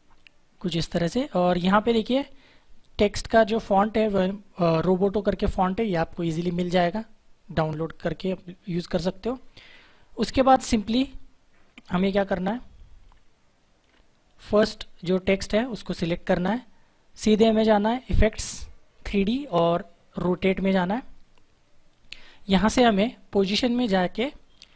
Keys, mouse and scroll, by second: 11.8 click, 13.0 click, 14.2 click, 18.0 click, 20.3 click, 24.1 click.